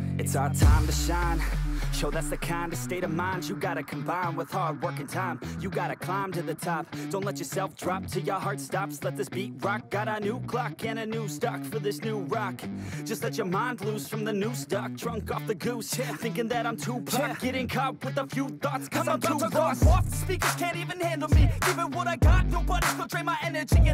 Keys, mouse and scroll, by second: 5.2 double click, 20.1 double click.